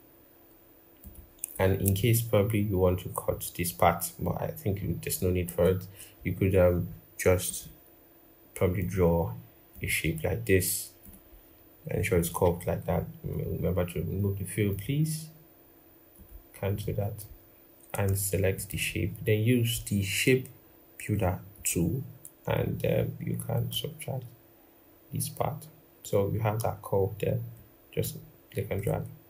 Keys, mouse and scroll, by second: 18.3 shift+click, 23.3 alt+click, 27.3 alt+click.